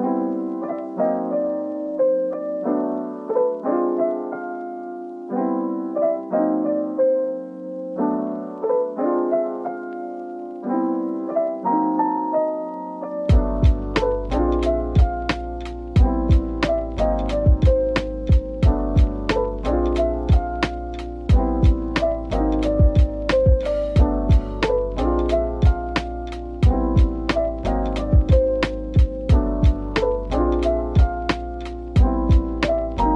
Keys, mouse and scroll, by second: 5.8-8.9 scroll up 1, 8.9 Tab, 9.9 typing, 13.9-16.5 typing, 18.1-18.4 typing, 19.5 typing, 22.5-23.0 scroll down 1, 23.0 Tab, 23.4 middle click, 24.0-24.4 scroll down 1, 24.7 middle click, 26.7-30.2 scroll down 1, 31.4-32.6 scroll up 1, 32.6 Tab.